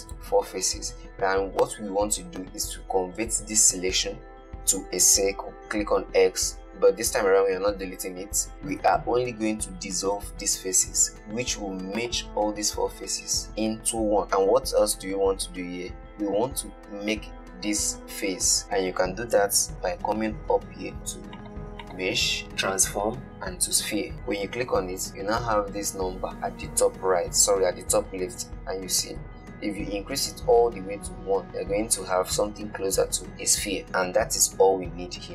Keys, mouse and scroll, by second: 0.3 shift+click, 5.6 x, 21.7 click, 22.1 click.